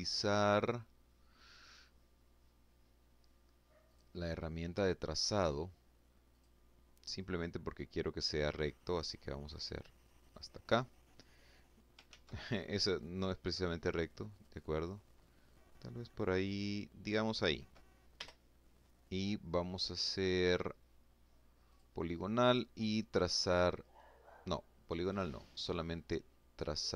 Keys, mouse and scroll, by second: 2.5 click, 5.0 click, 8.9 click, 10.7 ctrl+z, 13.0 click, 14.2-16.3 drag, 16.8 Return, 20.4 click, 23.7 click.